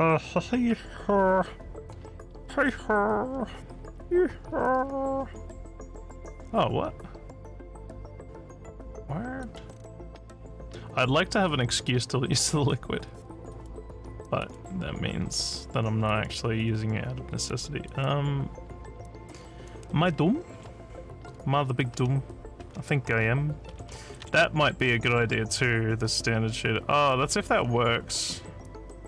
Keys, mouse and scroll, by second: 2.5 scroll down 1, 3.3 scroll down 1, 3.9 scroll down 1, 4.8 scroll down 1, 9.4 click, 10.0 click, 11.5 click, 13.5 click, 14.5 click, 16.1 click, 17.9 click.